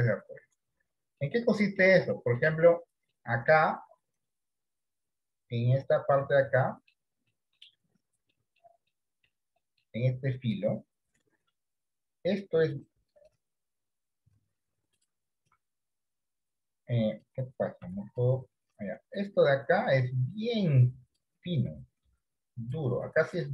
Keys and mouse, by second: 1.3 middle click, 2.4 shift+middle click, 3.3 middle click, 5.1 click, 6.8 middle click, 7.4 middle click, 8.4 middle click, 9.0 middle click, 9.6 middle click, 11.5-12.4 d, 15.6 d, 16.1 d, 18.0 click, 18.0 right click, 18.4-19.0 d, 19.2-21.2 drag, 19.2-23.3 d, 22.1-23.5 drag.